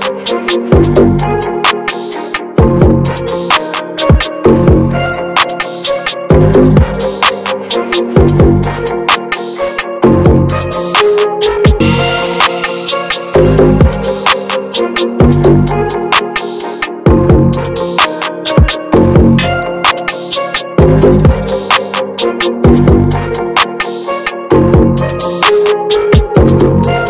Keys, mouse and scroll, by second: 0.0-2.8 drag, 2.8 ctrl+z, 3.7 f, 4.8-7.9 drag, 8.2 ctrl+z, 9.5 ctrl+scroll down 1, 10.5-10.8 ctrl+scroll down 1, 12.2-13.7 drag, 13.7 ctrl+z, 15.3-15.9 ctrl+scroll down 2, 18.4-18.7 ctrl+scroll up 1, 19.1-22.3 drag, 23.6 ctrl+z, 24.5 ctrl+scroll down 1, 26.2 ctrl+scroll down 1.